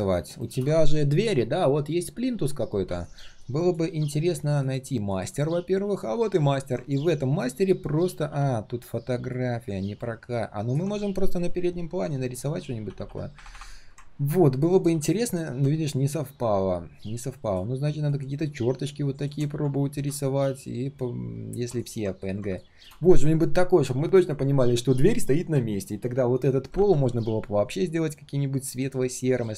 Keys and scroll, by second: 4.3 ctrl+shift+3, 6.8 ctrl+shift+3.